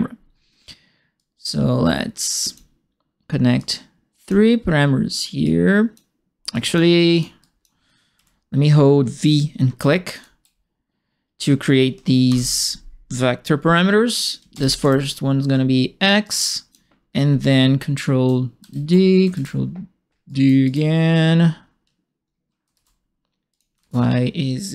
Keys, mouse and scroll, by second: 1.1-2.5 drag, 3.5 click, 5.4 click, 6.5 click, 7.1 click, 7.4 click, 8.1 Delete, 9.7 v, 10.1 click, 12.2 shift+Home, 14.5 shift+x, 14.8 Return, 16.2 click, 18.6 ctrl+d, 19.3 ctrl+d, 20.2 right click, 20.6 click, 22.7 ctrl+d, 23.5 click, 23.8 ctrl+d.